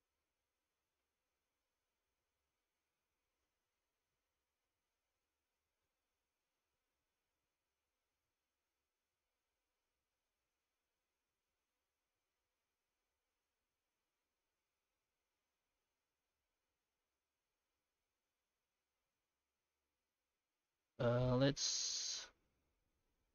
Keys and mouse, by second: 0.2 middle click, 1.6 middle click, 3.0 F9, 12.3-14.8 middle drag, 14.8 F9, 18.1-22.2 middle drag, 22.6 F9.